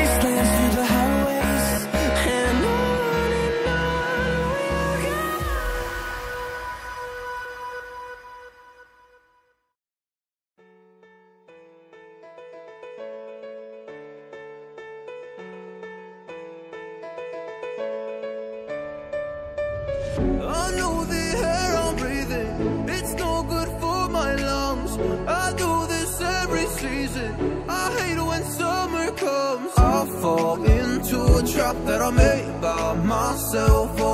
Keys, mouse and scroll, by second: 1.1 shift+click, 13.6-14.9 typing, 15.8 click, 19.5 scroll up 1, 20.2 click, 21.4 typing, 23.1 click, 28.0 shift+click, 30.9 double click, 31.6 click, 34.0 click.